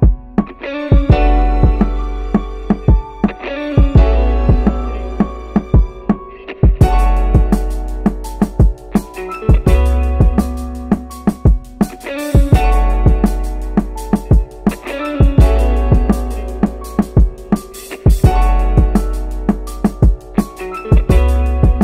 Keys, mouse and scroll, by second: 2.0 click, 3.2 middle click, 4.8 KP_1, 7.0 click, 8.9 click, 10.1 click, 11.8 click, 13.2-13.8 drag, 14.4 click, 15.4-16.2 drag, 16.7 click, 17.5 click, 18.4-19.3 drag, 20.6 click.